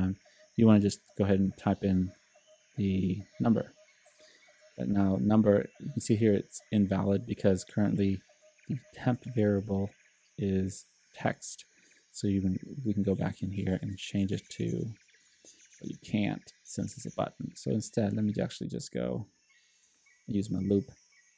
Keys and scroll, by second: 1.4 e, 2.6-3.5 typing.